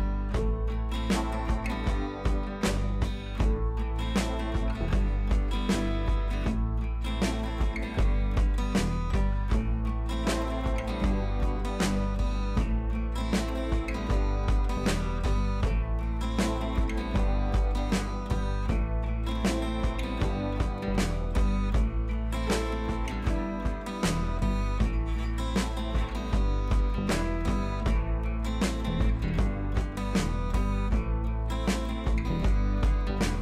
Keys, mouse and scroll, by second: 3.6 click, 3.9 click, 4.8 b, 5.5-5.9 scroll up 1, 5.9 [, 6.1 scroll up 1, 6.5 click, 9.0 click, 9.7 scroll down 1, 10.1 ], 10.6 ], 10.8 click, 12.3 scroll down 1, 13.0 click, 13.8 scroll up 1, 14.1 ], 14.2 ], 14.5-14.9 scroll down 1, 15.0-15.5 scroll down 2, 15.5 click, 17.1-18.1 scroll down 1, 18.3 click, 24.1 click, 25.0 shift+click, 29.8 click, 30.7 ctrl+z, 31.1-33.1 drag.